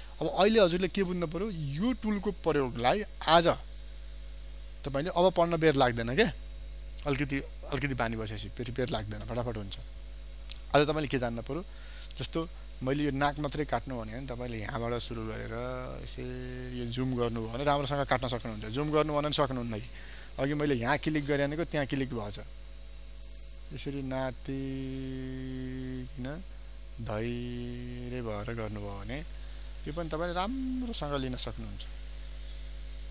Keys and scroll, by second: 10.0 ctrl+space, 17.1 ctrl+space.